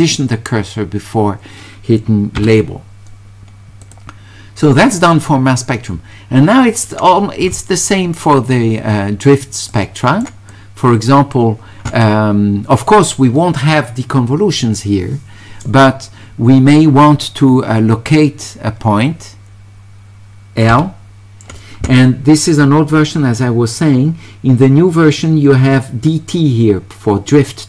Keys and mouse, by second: 3.8 click, 9.7 right click, 10.5 click.